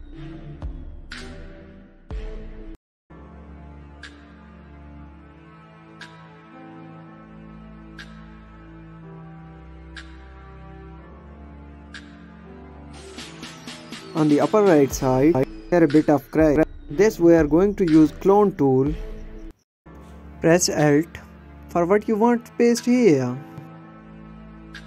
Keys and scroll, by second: 1.8 space, 2.8 space, 5.5 space, 6.6 space, 7.6 space, 9.6 space, 10.2 space, 11.2 space, 12.2 space, 12.7 space, 18.7 alt+space.